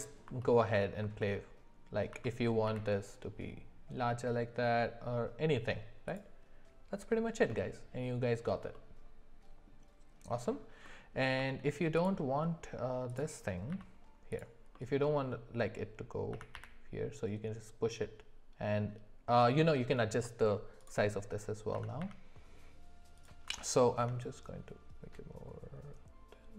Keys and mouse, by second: 0.4 alt+middle click, 0.6 alt+middle click, 2.1 s, 7.5 middle click, 8.7 middle click, 10.8 middle click, 11.3 z, 13.7 z, 14.7 middle click, 16.3 s, 21.7 s, 23.5 s.